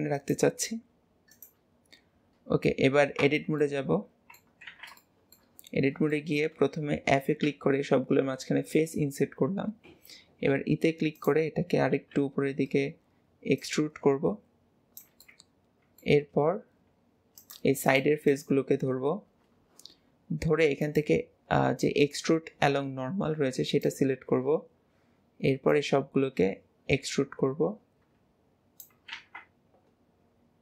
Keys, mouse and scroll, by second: 3.7-4.8 middle drag, 5.0 middle click, 6.2 middle click, 12.0 KP_3, 13.7 click, 15.3-17.4 middle drag, 18.0 click, 18.4 click, 20.9-24.9 drag, 25.8 click.